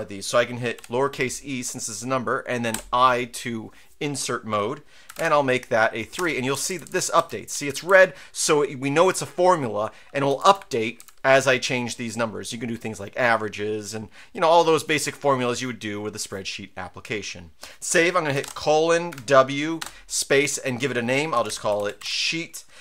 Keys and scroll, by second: 0.7 e, 2.7 i, 5.1 Delete, 5.1 3, 6.1 Return, 6.5 Down, 6.7 Down, 6.8 Down, 7.1 Up, 7.5 Right, 7.7 Left, 10.3 Up, 10.4 Up, 11.0 Up, 18.4-19.8 typing, 21.1-22.5 typing.